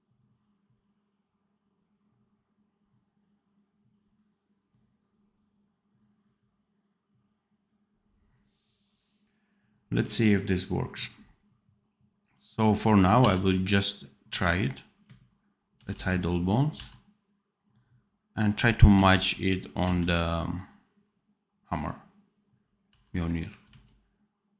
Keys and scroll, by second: 13.1 v, 15.7 ctrl+b, 16.8 v, 18.9 c, 22.8 v, 23.7 x.